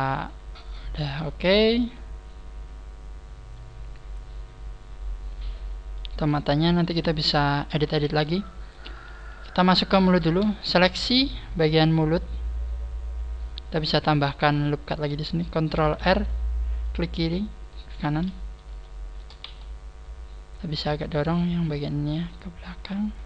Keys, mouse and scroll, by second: 1.9 middle click, 7.1 KP_1, 7.9-8.3 scroll up 4, 8.4 shift+middle click, 8.9 scroll up 2, 9.1 a, 10.4 a, 10.7 alt+shift+right click, 15.7 ctrl+r, 17.6 right click, 18.2-18.7 scroll up 4, 18.7 shift+middle click, 19.4 z, 20.0-20.3 scroll up 2, 21.1 right click, 22.2 click.